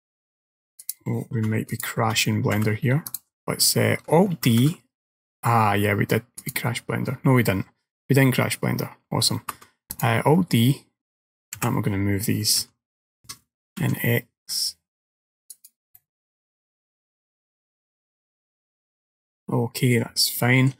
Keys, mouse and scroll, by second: 0.9 click, 1.8-2.2 shift+click, 2.6 g, 9.5 alt+d, 11.6 g, 16.0 middle click, 20.4 shift+middle click.